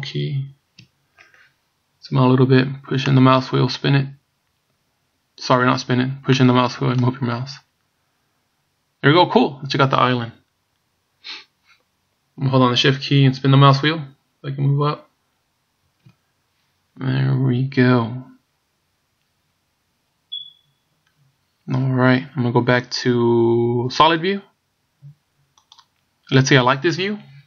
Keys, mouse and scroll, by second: 0.1 KP_Decimal, 2.5-2.9 scroll down 1, 3.7 middle click, 7.8 middle click, 13.9-14.3 shift+scroll up 1, 15.4 shift+scroll up 1, 23.3 click.